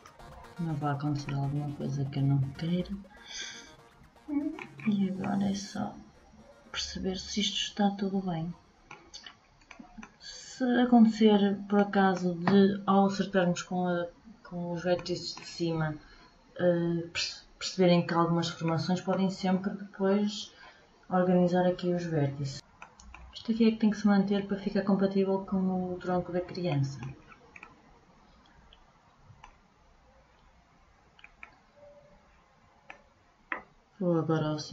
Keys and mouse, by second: 8.8-13.8 middle drag, 18.2 middle click.